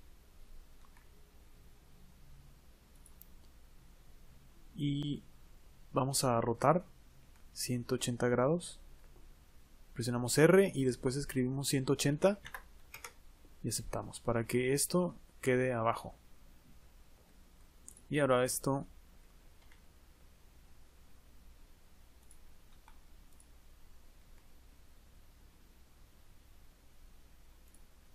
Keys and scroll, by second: 10.7 r.